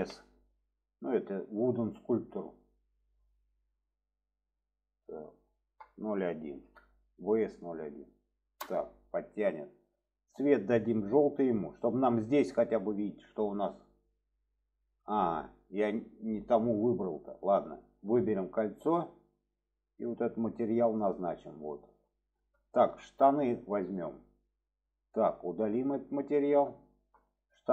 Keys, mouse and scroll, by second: 10.3 click, 13.5 middle click, 15.0 shift+middle click, 17.2-18.2 drag, 19.5-20.8 drag, 21.5 middle click, 22.7 shift+middle drag, 23.1 click, 25.7-27.0 drag.